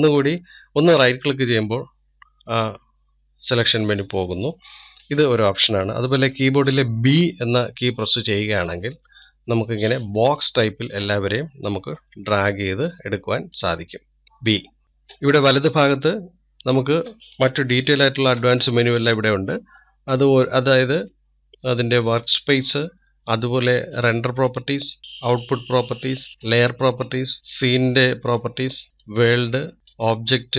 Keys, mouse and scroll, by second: 3.8-6.2 middle drag, 6.2 click, 17.1 click, 18.0-19.0 scroll up 1, 19.0-30.5 shift+middle drag.